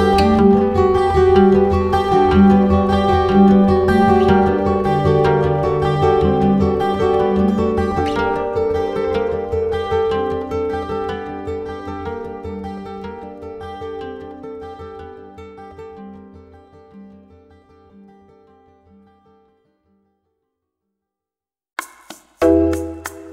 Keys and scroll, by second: 4.7 typing, 6.4 space, 12.1 ctrl+z, 12.2 ctrl+z, 15.9 space, 17.6 ctrl+alt+z, 19.5 ctrl+z, 22.4 space.